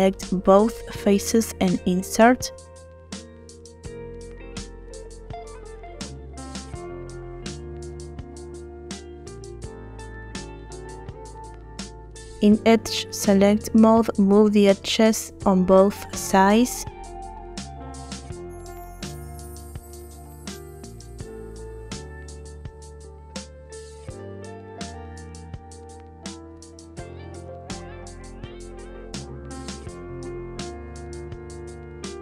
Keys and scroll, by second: 5.1 i, 12.2 2.